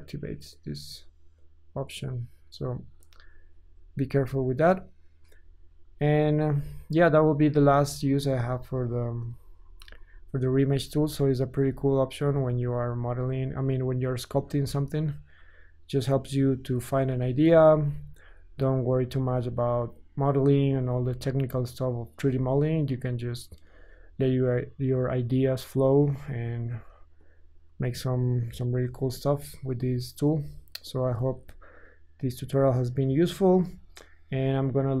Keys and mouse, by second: 5.2 KP_1, 7.1 click, 7.9 ctrl+z, 8.1 ctrl+z, 8.3 ctrl+z, 8.7 ctrl+z, 8.9 ctrl+z, 9.1 ctrl+z, 9.3 ctrl+z, 9.6 ctrl+z, 9.7 ctrl+z, 9.9 ctrl+z, 10.1 ctrl+z, 10.5 ctrl+z, 10.7 ctrl+z, 10.9 ctrl+z, 11.1 ctrl+z, 12.8 ctrl+z, 13.1 ctrl+z, 13.1 ctrl+drag, 13.3-13.9 drag, 14.4 ctrl+Tab, 17.7 ctrl+z, 18.3 ctrl+z, 19.3 ctrl+z, 20.8 Tab, 22.2 Tab, 23.7-27.3 alt+shift+drag, 26.7 f, 27.3-27.7 middle drag, 27.7-35.0 drag, 28.8 g.